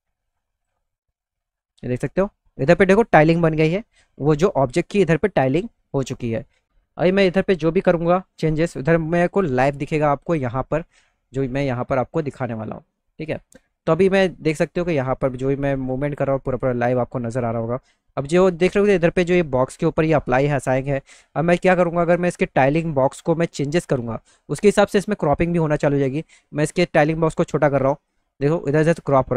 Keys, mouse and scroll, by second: 0.3 click, 9.2 click, 11.2 middle click, 14.1-15.5 middle drag, 17.0 middle click, 19.8 middle click, 19.8 scroll up 1, 20.3-21.4 middle drag, 26.8-28.1 drag.